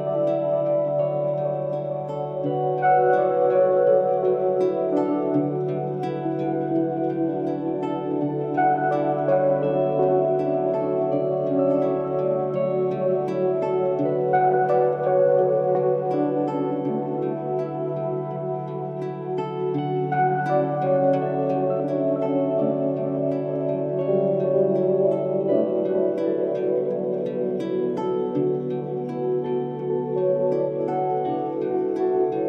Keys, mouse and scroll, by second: 1.7 middle click, 2.4 KP_1, 2.7 scroll up 4, 3.1-4.7 shift+middle drag, 4.8 click, 4.8 scroll up 4, 5.6 c, 13.5-15.3 middle drag, 15.5 r, 18.5 r, 21.8 g, 28.3-29.8 middle drag, 29.9-32.1 middle drag, 32.1-32.4 scroll down 4.